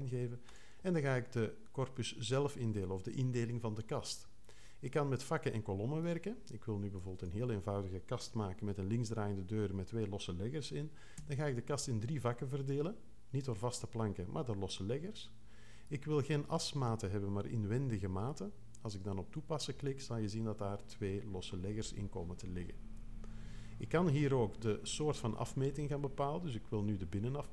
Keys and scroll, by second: 11.1 3.